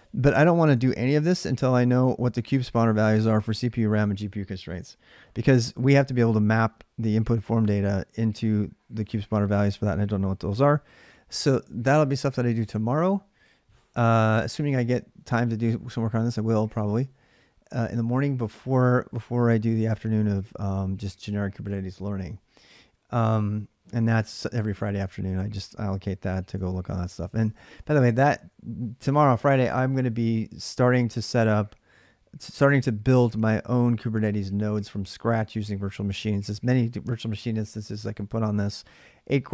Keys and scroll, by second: 0.4-2.7 typing, 26.3 ctrl+[, 26.4-28.1 typing.